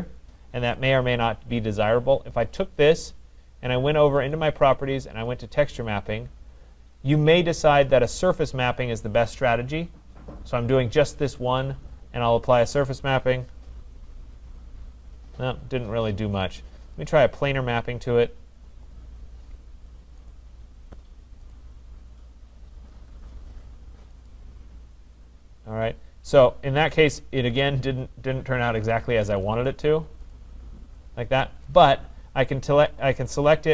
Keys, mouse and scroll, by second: 0.9 click, 4.2 click, 4.4 click, 5.5 click, 11.8-16.6 drag, 17.6-20.6 drag, 21.6 click, 24.4 click, 30.3 click, 31.7 click.